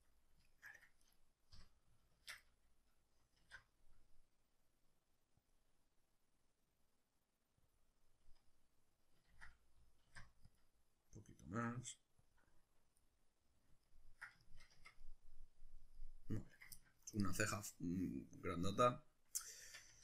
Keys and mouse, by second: 0.0 click, 0.2 ctrl+middle click, 1.0 right click, 1.5 l, 2.2 shift+Tab, 2.4-7.8 middle drag, 3.4 alt+e, 7.8 click, 8.0-12.3 middle drag, 9.3 ctrl+z, 10.1 alt+e, 12.3 click, 13.0-15.2 middle drag, 14.7 Tab, 19.6 Tab.